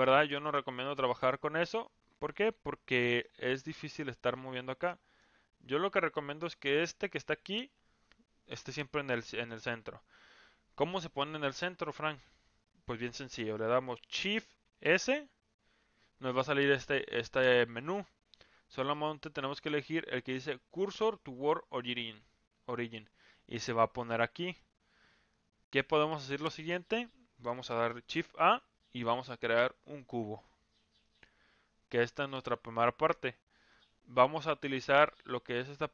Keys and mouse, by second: 0.0 ctrl+z, 0.8 ctrl+z, 1.8 ctrl+z, 3.0 middle click, 4.2-5.2 middle drag, 14.6 shift+s, 24.2-24.6 middle drag, 28.2 shift+a, 31.0-31.9 middle drag.